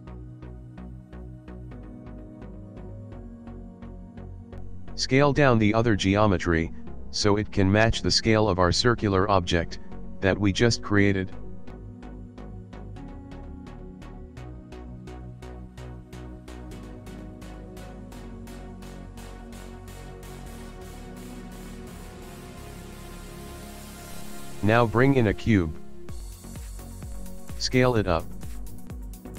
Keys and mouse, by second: 0.1 click, 0.7 g, 2.2 click, 2.9 g, 4.1 click, 4.5 s, 6.0 middle click, 6.7 g, 8.3 middle click, 9.1 g, 11.2 s, 12.1 shift+middle click, 13.2 KP_Decimal, 14.1 middle click, 14.3 shift+middle click, 14.9 ctrl+middle click, 15.6 s, 17.9 g, 18.8 shift+middle click, 19.4 ctrl+middle click, 19.8 click, 20.6 ctrl+middle click, 20.8 middle click, 21.3 shift+middle click, 21.8 ctrl+middle click, 22.6 shift+middle click, 23.0 click, 23.8 shift+a, 26.3 middle click, 27.2 middle click, 27.9 s.